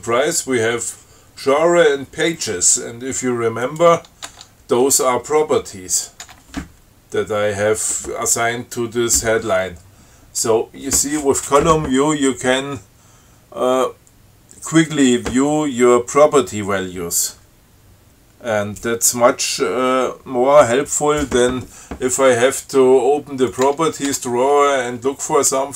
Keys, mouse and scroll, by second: 3.9 click, 4.5 Tab, 6.2 click, 6.5 Tab, 23.7 click, 23.9 Tab.